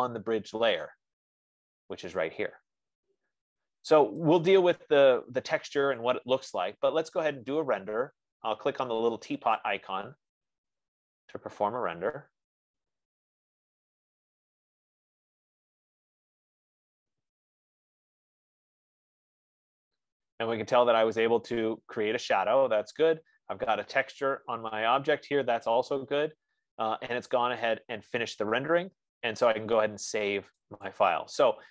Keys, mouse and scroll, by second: 1.4 click, 6.5 click, 10.0 click, 12.0-15.0 drag, 31.4-31.7 drag.